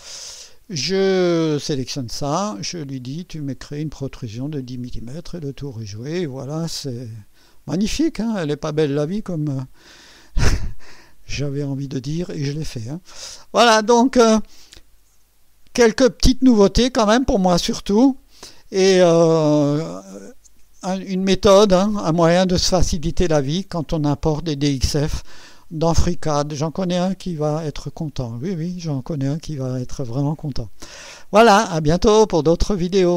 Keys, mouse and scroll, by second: 0.2 click, 2.6 click, 5.3 click, 6.5-9.0 drag, 9.8-11.3 drag, 12.4 click, 13.2 scroll up 1, 13.8 scroll down 2, 14.3-15.2 right drag, 16.9 scroll up 2, 17.6 scroll down 2, 18.2-19.0 right drag, 28.7 right click, 30.5 click.